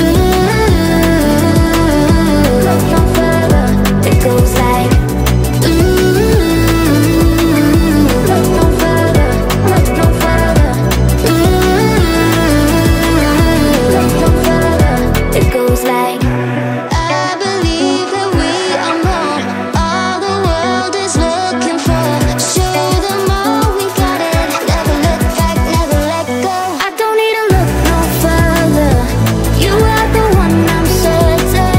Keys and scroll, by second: 7.2-8.5 typing, 9.6-13.9 typing, 18.2 w, 20.1-24.2 typing.